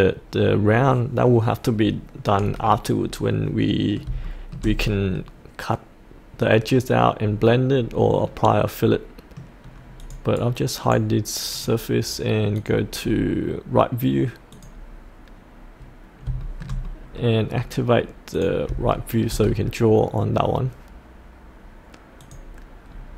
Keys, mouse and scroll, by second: 1.8-2.1 scroll up 1, 2.7 middle click, 4.2 shift+middle click, 4.8 middle click, 7.2-8.3 scroll down 1, 8.3 middle click, 10.0 click, 10.3 right click, 11.5 click, 13.0-14.5 scroll down 1, 14.5 click, 15.4 click, 16.4 shift+middle click, 17.5-18.3 scroll down 1, 18.3 click, 18.9 shift+middle click, 19.4-22.2 scroll down 1, 22.2 click, 22.9-23.1 scroll down 1.